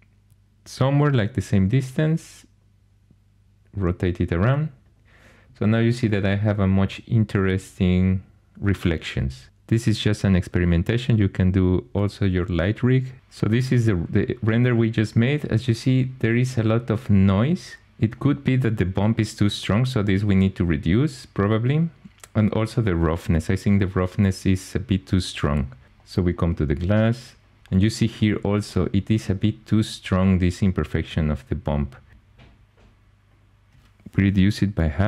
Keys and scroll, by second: 1.6 r.